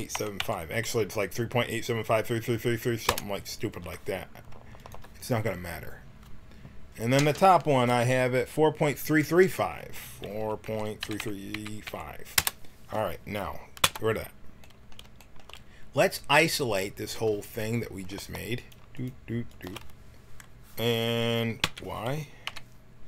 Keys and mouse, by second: 13.8 n, 17.5-21.6 drag, 21.6 y, 22.4 KP_1.